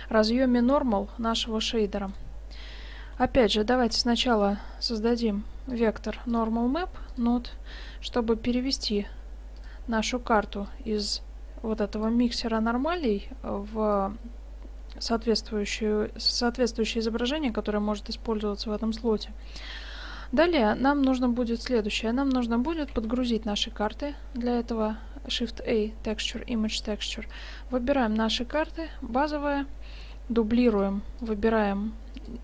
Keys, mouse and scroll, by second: 0.8-2.2 middle drag, 2.2-4.0 drag, 3.2 g, 3.9 shift+a, 7.9-8.5 middle drag, 8.9-9.7 drag, 8.9-12.1 right drag, 9.2 g, 10.7 click, 12.1-12.5 drag, 13.0-14.8 drag, 15.8-20.2 middle drag, 21.7-22.8 middle drag, 22.8 click, 23.0 shift+a, 24.5 click, 27.4-29.1 drag, 29.2 click, 30.1 shift+d, 31.3-32.4 drag.